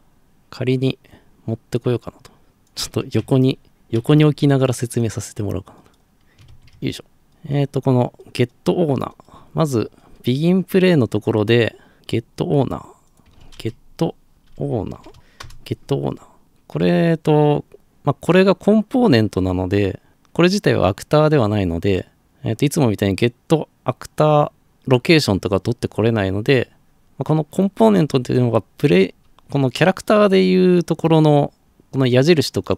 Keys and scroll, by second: 3.9 ctrl+c, 6.5 ctrl+v, 13.1-15.7 typing.